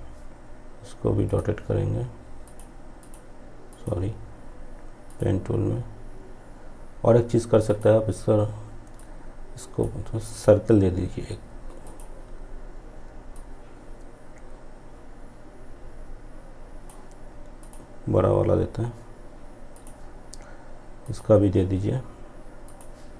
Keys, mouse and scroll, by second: 6.7-16.6 drag, 18.8-23.1 drag.